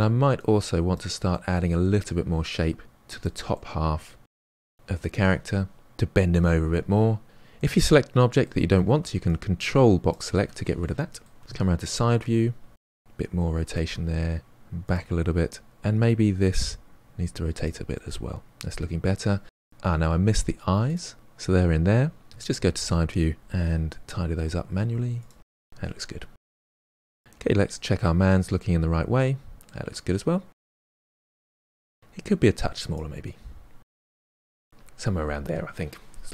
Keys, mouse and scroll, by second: 0.9 drag, 1.6-2.3 middle drag, 2.3 click, 3.3-4.4 middle drag, 4.4-5.7 shift+drag, 7.5-9.2 middle drag, 9.2 ctrl+click, 10.8 middle click, 11.4 KP_3, 13.0 r, 14.6 g, 15.7 click, 16.1 r, 17.2-18.9 middle drag, 18.9-19.3 scroll up 2, 19.3-19.7 shift+middle drag, 19.7-20.9 scroll up 2, 20.9 click, 22.2 KP_3, 22.8 g, 23.9 r, 24.4 g, 25.3-26.1 middle drag, 26.1 scroll down 3, 26.3-26.9 middle drag, 26.9-27.3 scroll up 2, 27.3-28.6 shift+middle drag, 28.6 scroll down 1, 28.8-29.8 middle drag, 31.9-32.9 drag, 33.1 s, 33.6 KP_3, 34.1 g.